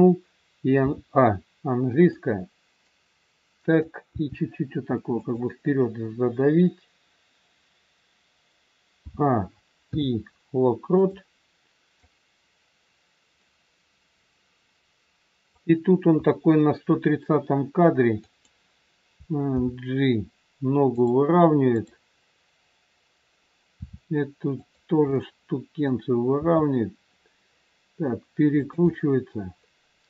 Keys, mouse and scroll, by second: 0.8 a, 2.1 click, 4.0 r, 9.0 a, 9.9 i, 12.1 click, 18.1 click, 19.5 g, 21.7 click, 23.7 r, 25.0 middle click, 26.2 r, 28.8 middle click.